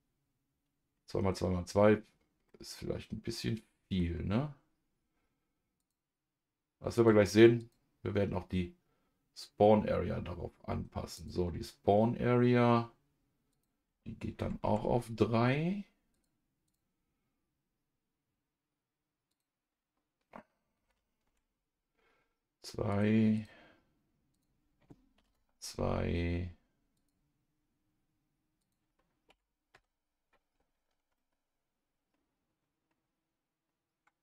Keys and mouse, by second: 2.5-4.0 middle drag, 5.8 click, 7.6 click, 11.1 click, 13.5-16.1 drag, 16.6 click, 19.3-22.9 drag, 23.3-26.8 drag, 28.6-29.7 drag, 31.1-34.2 middle drag.